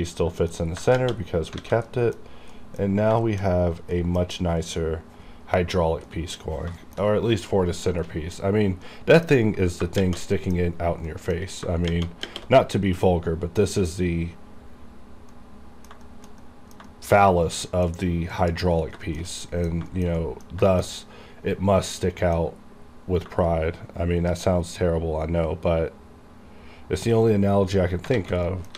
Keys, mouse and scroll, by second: 0.0 middle click, 0.6 scroll down 1, 1.3-1.6 shift+scroll down 3, 1.6 alt+a, 1.9 middle click, 2.3 scroll up 1, 2.6 middle click, 3.0 scroll up 1, 3.3 shift+middle click, 3.8 scroll down 1, 4.0 middle click, 4.3 scroll up 1, 6.1 middle click, 6.5 scroll up 1, 6.9 shift+middle click, 7.1 shift+scroll down 1, 8.1 middle click, 8.8 scroll down 1, 8.9 middle click, 9.1 middle click, 9.3-9.9 scroll up 1, 10.4-11.7 middle drag, 12.7-14.1 middle drag, 14.1-14.7 scroll up 2, 14.7-15.2 scroll up 1, 15.2 scroll up 1, 15.4 middle click, 16.1 shift+middle click, 16.5 middle click, 16.9 shift+middle click, 17.5 scroll down 1, 17.7 middle click, 18.0-18.9 scroll up 1, 19.0 scroll, 19.1 shift+middle click, 19.4 middle click, 20.0 shift+middle click, 20.0 shift+middle click, 20.2 middle click, 20.7 shift+middle click, 22.0-24.3 middle drag, 24.3 shift+right click, 28.2 alt+a, 28.5 middle click.